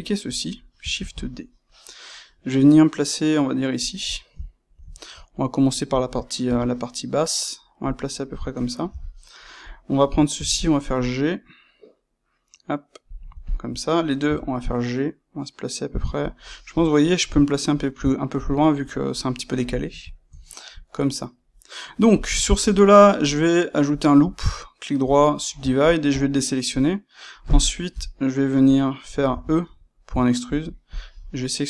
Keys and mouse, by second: 0.9 shift+d, 3.9 click, 4.0-7.9 ctrl+middle drag, 6.4 g, 7.9 click, 8.8 Tab, 9.6 click, 10.3 g, 13.4 shift+click, 14.2 g, 16.2 click, 20.1-23.4 ctrl+shift+middle drag, 23.4-25.7 right drag, 25.7 shift+click, 26.0-30.5 middle drag, 27.9 KP_1, 29.2 e, 30.8 click.